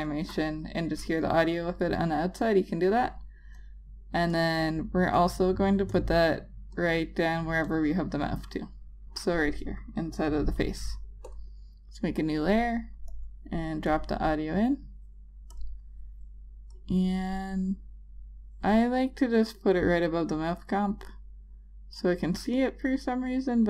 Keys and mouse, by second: 3.7 space, 4.7 double click, 5.3 click, 5.5 double click, 6.1 click, 7.0 double click, 7.8 click, 8.0 double click, 9.2 click.